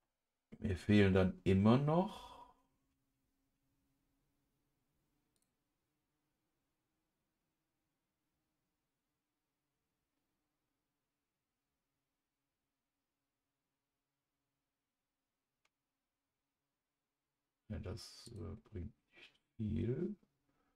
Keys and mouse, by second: 5.4 click, 18.3 click.